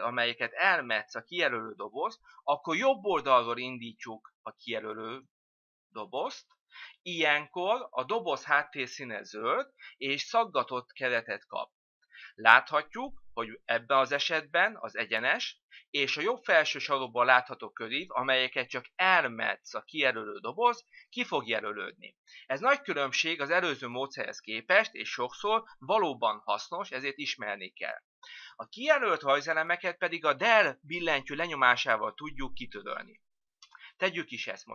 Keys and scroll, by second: 31.1 Delete.